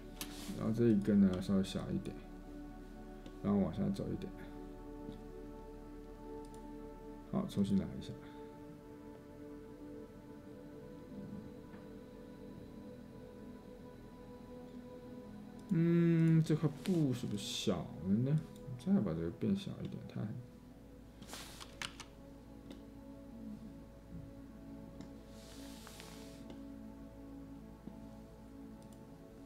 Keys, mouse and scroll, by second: 21.9 ctrl+z.